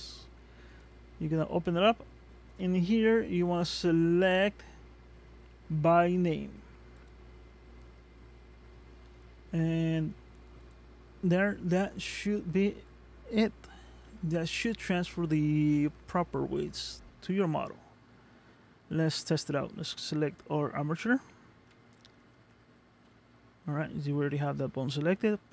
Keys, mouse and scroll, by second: 0.7 click, 3.5 click, 10.6 click, 14.0 ctrl+Tab, 18.9 click, 21.7 ctrl+Tab.